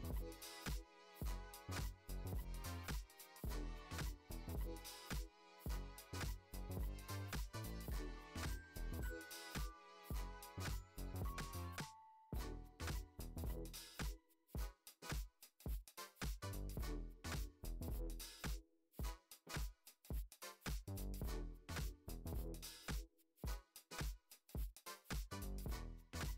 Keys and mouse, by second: 0.0 g, 0.9 g, 2.1 s, 4.6 shift+click, 6.2 ctrl+shift+b, 8.0 click, 8.5 click, 8.9 shift+middle drag, 9.5 middle click, 9.8 g, 12.1 s, 14.5 g, 15.6 shift+middle click, 16.0 g, 17.4 s, 19.9 s, 21.6 click, 22.7 ctrl+a, 23.4 click, 23.8 x, 24.7 click, 25.0 Tab, 26.0 click.